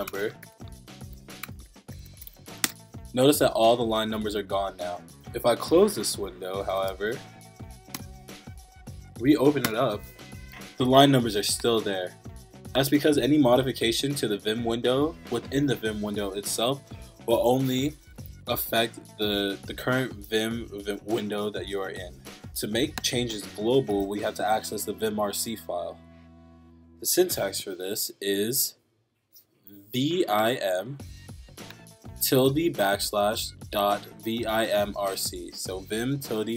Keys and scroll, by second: 0.0-2.8 typing, 6.3-7.3 typing, 7.9 Return, 8.7 Up, 9.6 Return, 28.1 Up.